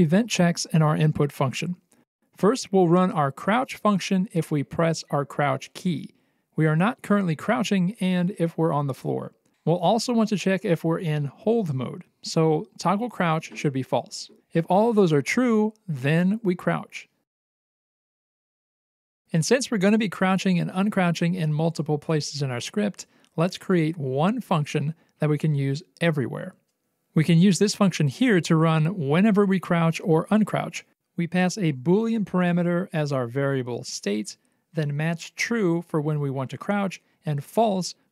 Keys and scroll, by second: 16.2 alt+x, 21.1 c, 23.4 Escape.